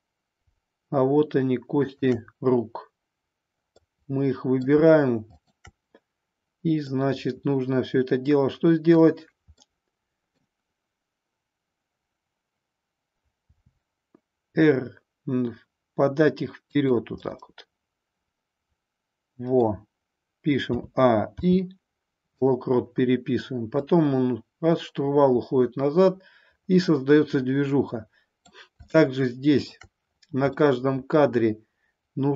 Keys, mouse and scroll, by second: 3.7-4.7 middle drag, 5.3 shift+click, 6.8-9.0 middle drag, 9.6 middle click, 13.4 r, 16.8 click, 17.3-19.7 middle drag, 20.7 a, 21.3 i, 23.7-28.5 drag, 28.9 shift+middle click, 30.7-32.3 middle drag.